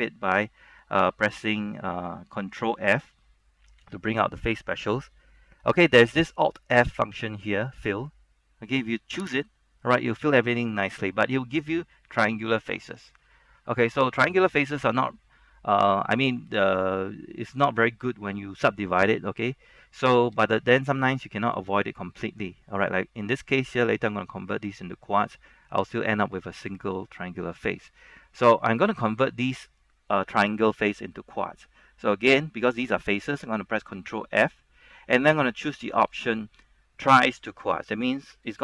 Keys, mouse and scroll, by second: 9.4 ctrl+f, 9.4 click, 10.3 middle click, 11.1-15.9 scroll up 1, 15.9-16.3 scroll down 1, 16.3-18.4 scroll up 1, 18.4 Caps_Lock, 18.5 middle click, 19.6 shift+middle click, 20.2-20.5 scroll up 1, 20.5 shift+middle click, 28.0 shift+middle click, 28.7 scroll down 1, 34.4 ctrl+f.